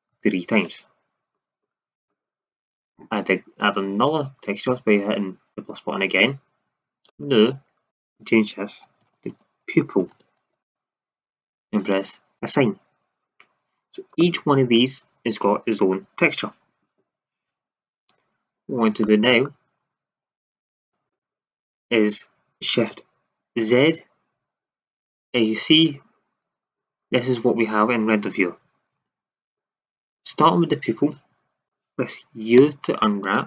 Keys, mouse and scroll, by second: 0.0 ctrl+KP_Add, 5.5-9.9 drag, 12.4-14.8 drag, 14.8-23.8 middle drag, 23.8 shift+z, 29.0 shift+z, 29.5-32.1 middle drag, 32.5 u.